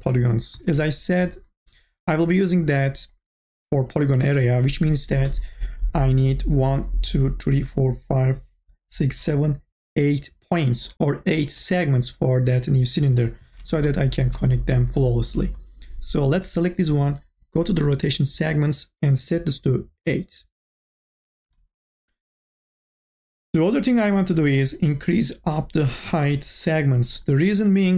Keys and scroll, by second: 19.4 KP_8.